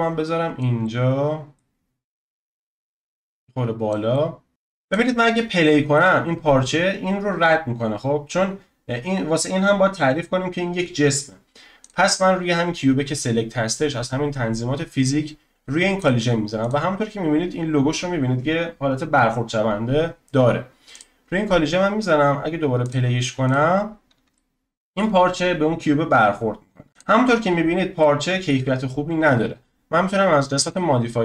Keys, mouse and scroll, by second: 0.8-2.1 middle drag, 2.1-3.2 scroll up 1, 3.2 click, 4.1-4.5 shift+middle drag, 4.5 click, 5.3-8.3 middle drag, 8.5-11.0 scroll up 2, 11.0-11.8 scroll up 1, 11.8-14.9 drag, 16.0-19.7 drag, 20.9-24.3 drag, 24.3-26.9 shift+middle drag, 26.9 click, 27.2-27.8 scroll up 1, 28.0-28.7 shift+middle drag, 28.7-30.7 scroll down 1, 30.7 click.